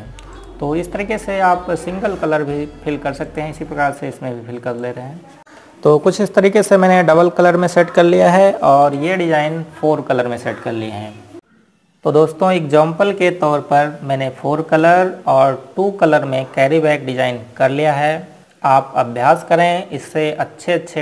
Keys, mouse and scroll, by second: 3.0-3.4 scroll up 1, 4.9 click, 5.4 Left, 6.1 ctrl+click, 10.5 Page_Up, 16.5 Page_Down.